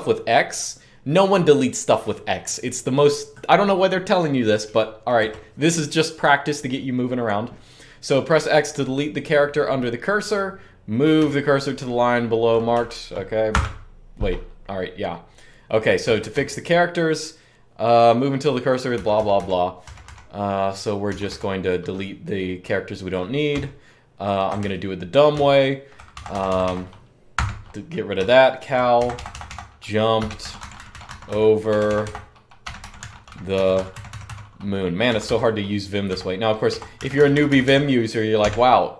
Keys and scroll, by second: 4.9 k, 10.9-12.2 1, 12.5 1, 13.3 x, 15.8-16.1 typing, 18.7-19.8 typing, 21.0 typing, 23.3-37.7 typing.